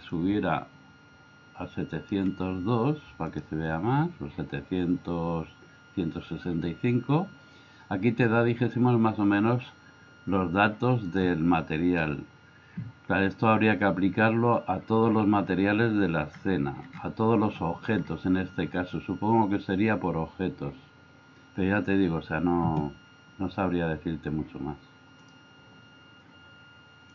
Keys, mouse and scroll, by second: 0.2-2.2 drag, 3.3 click, 11.1 click.